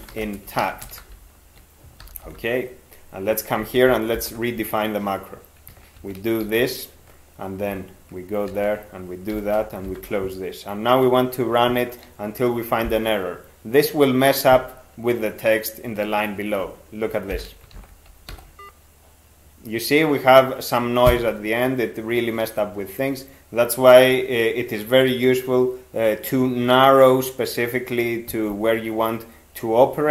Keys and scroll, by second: 0.0-1.4 typing, 2.0 ctrl+p, 2.3 ctrl+p, 3.6 ctrl+x, 4.1 (, 5.9 ctrl+2, 6.4 ctrl+d, 7.7 ctrl+f, 8.5 ctrl+d, 9.3 ctrl+x, 9.9 ), 17.3 alt+0, 17.7 ctrl+x, 18.3 e.